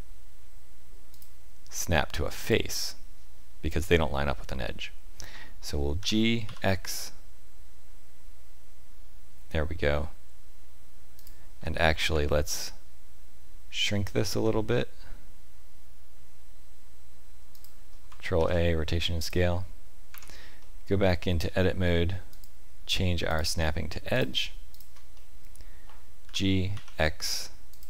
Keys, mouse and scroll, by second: 1.1 click, 4.6 middle click, 6.0 g, 12.1 Tab, 14.4 s, 18.3 ctrl+a, 20.1 Tab, 20.6 middle click, 22.3 click, 24.1 click, 24.7 shift+click, 25.1 middle click, 26.2 g.